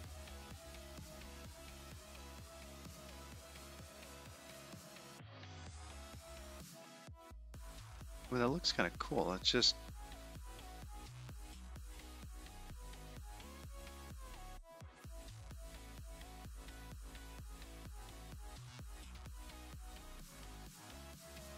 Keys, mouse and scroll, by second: 1.8-2.8 scroll up 2, 2.8-3.4 scroll up 10, 3.9-5.1 scroll up 13, 6.2 click, 6.6 click, 8.5 middle click, 10.1 middle click, 14.3-15.6 scroll down 14, 16.1 scroll down 6, 17.1-17.5 scroll down 8, 17.3-18.5 scroll up 8, 18.5-20.2 scroll up 22, 20.9-21.5 scroll up 18.